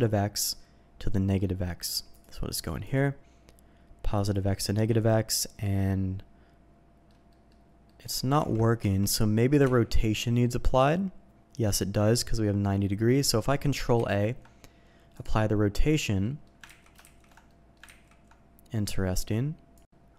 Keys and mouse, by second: 2.1 click, 2.6-4.3 drag, 4.9 middle click, 5.8-7.0 middle drag, 7.3 middle click, 7.8 middle click, 8.3 ctrl+z, 8.8 Tab, 9.6 n, 10.6 click, 13.9 ctrl+a, 16.2 drag, 16.7 ctrl+z, 17.5 middle click, 17.9 ctrl+z, 19.9 middle click.